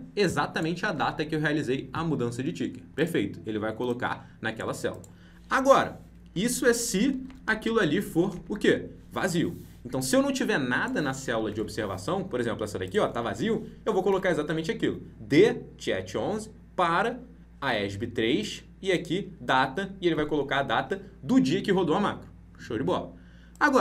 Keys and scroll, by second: 7.2 ctrl+c, 11.4 alt+Tab.